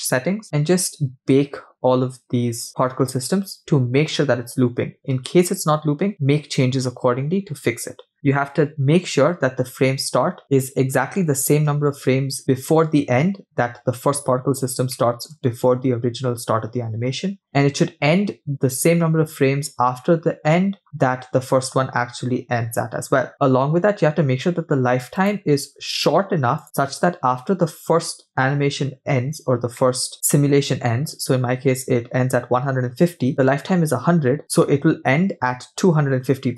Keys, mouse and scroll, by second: 8.7-9.1 scroll up 3, 14.5-15.3 scroll down 2, 14.9 middle click, 25.2-26.9 drag, 28.9-29.7 scroll down 2, 29.9 middle click.